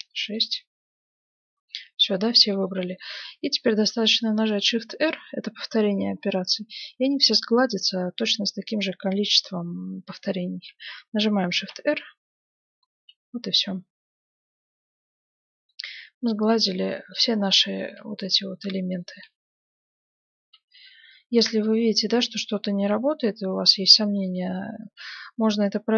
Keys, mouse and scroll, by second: 0.4-2.2 middle drag, 2.7-8.1 middle drag, 11.6 shift+r, 12.5-13.6 scroll up 1, 12.9 Tab, 13.6-15.6 middle drag, 15.8-16.4 scroll down 1, 16.4 middle click, 17.8 Tab, 19.4 shift+r, 20.5 Tab, 22.1-25.9 middle drag.